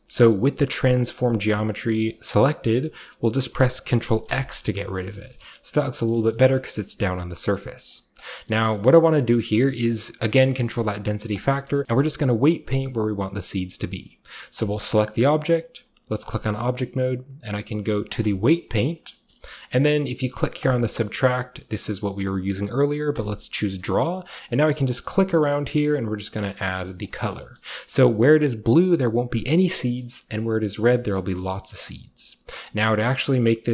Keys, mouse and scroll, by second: 0.2 click, 4.3 ctrl+x, 4.9 scroll down 1, 5.0-6.9 shift+middle drag, 7.0-7.4 shift+middle drag, 7.3-8.2 shift+scroll down 1, 7.5 shift+middle click, 7.9 shift+click, 8.7 click, 8.7 middle click, 8.7-10.7 scroll up 1, 8.9 click, 8.9-11.3 middle drag, 10.7-11.3 scroll up 1, 11.7 shift+middle click, 11.8-12.2 middle drag, 12.5 middle drag, 12.8 middle click, 13.6-15.8 middle drag, 15.8-16.2 scroll up 1, 16.2-18.2 drag, 20.6 click, 23.1 click, 23.7 middle click, 23.7-25.0 scroll up 1, 24.1 click, 24.3 click, 24.4 click, 24.6 click, 24.7 click, 24.9 click, 25.7 click, 25.9 click, 26.0 click, 26.2 click, 26.5 click, 27.0-29.6 drag, 27.5-29.6 scroll up 1, 29.7 middle click, 29.8-30.8 scroll up 1, 30.0-31.1 middle drag, 30.8 scroll down 1, 31.1-33.7 drag.